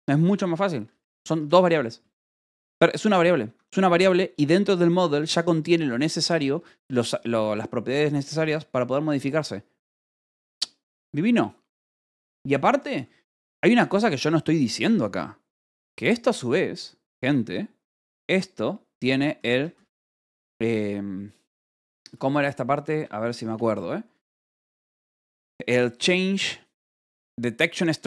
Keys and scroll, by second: 0.8 k, 1.6 Escape, 3.4 Escape, 3.9 h, 5.3-7.6 typing, 8.3 Escape, 13.7 k, 15.4 o, 19.0-20.3 typing, 22.3 BackSpace, 23.4-26.3 typing.